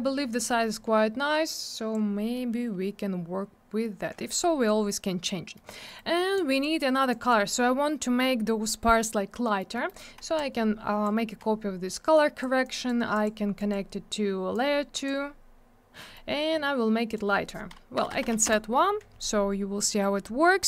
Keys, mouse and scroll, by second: 1.4 click, 5.5 middle click, 5.6 middle click, 5.8 middle click, 5.9 double middle click, 6.3 click, 7.1 click, 7.2 click, 9.4 middle click, 9.5 middle click, 9.7 middle click, 9.8 middle click, 10.3 shift+click, 12.1 click, 12.6 click, 13.1 click, 13.2 click, 13.5 click, 13.7 double click, 14.5 click, 16.0 middle click, 16.1 middle click, 17.0 click, 17.1 click, 17.9 BackSpace, 18.3 1, 18.4 Return, 20.3 scroll up 1.